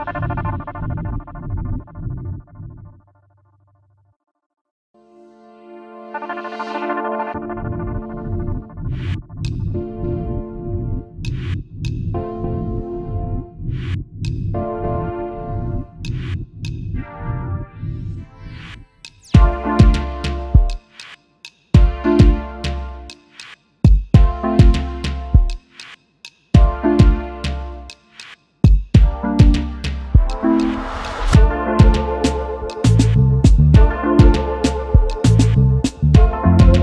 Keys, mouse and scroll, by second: 4.7-6.9 scroll up 1, 7.2 alt+scroll down 1, 8.3 typing, 10.1 typing, 10.8 alt+scroll up 1, 12.0 space, 12.4 alt+scroll up 1, 16.5 scroll down 1, 19.6-19.9 alt+scroll down 1, 21.0-21.9 typing, 22.5 double click, 22.9 alt+scroll down 1, 24.0 alt+scroll up 1, 24.5 space, 24.6 double click, 25.1-25.4 alt+scroll up 1, 28.9 alt+scroll down 1, 31.6 alt+scroll up 1, 32.9 shift+click, 33.9 alt+scroll down 1, 34.7 ctrl+g, 35.2-35.6 alt+scroll down 1.